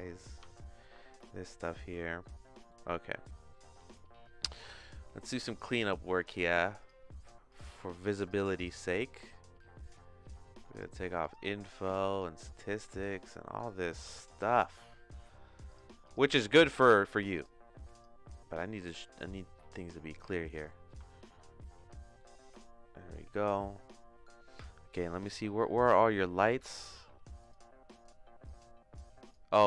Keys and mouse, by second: 0.2 click, 0.4 h, 0.9-3.1 shift+middle drag, 3.3 shift+middle click, 5.5 click, 6.9-9.0 drag, 10.7-13.4 drag, 14.0 t, 15.8 click, 16.6 click, 17.0 click, 17.4 click, 18.8 middle click, 19.2-20.5 shift+middle drag, 20.7 middle click, 21.0 shift+middle click, 22.1 middle click, 22.6 shift+middle click, 27.4 click, 27.9 click, 28.4 click.